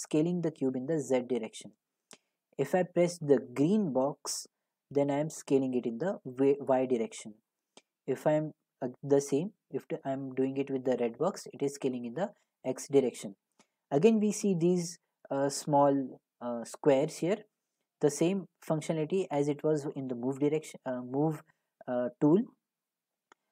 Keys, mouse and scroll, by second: 1.8 click, 2.8 click, 7.5-12.6 drag, 13.6-18.6 drag, 19.6-21.8 drag.